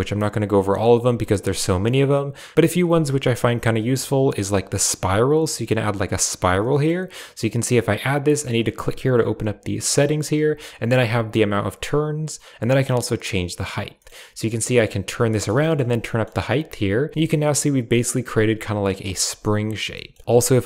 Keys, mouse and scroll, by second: 2.5 ctrl+z, 2.5 shift+a, 6.5 middle click, 10.5 click, 12.8 click, 13.9 middle click, 14.5 click, 15.5 shift+middle click, 15.9 middle click, 17.0 shift+click, 17.1 Tab, 17.1-18.8 middle drag, 19.0 shift+middle click, 19.8 shift+middle drag, 20.2 shift+a.